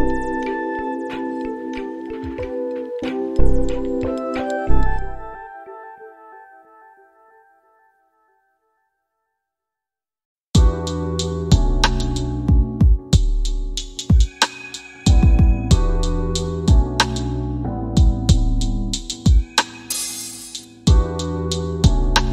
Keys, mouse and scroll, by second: 1.0-4.6 drag, 6.1 click, 7.4-12.8 drag, 15.7 middle click, 18.5 shift+Left, 19.8 space.